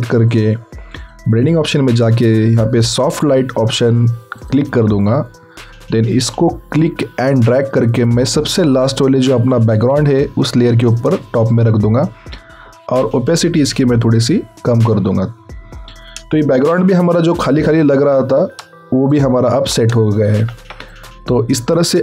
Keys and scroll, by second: 16.6 ctrl+t, 20.3 ctrl+alt+t.